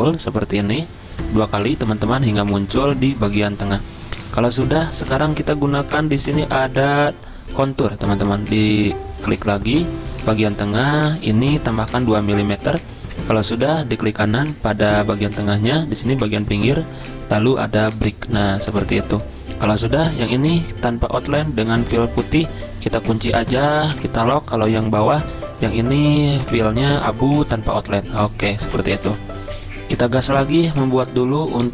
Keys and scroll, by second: 11.7 2, 29.0 z.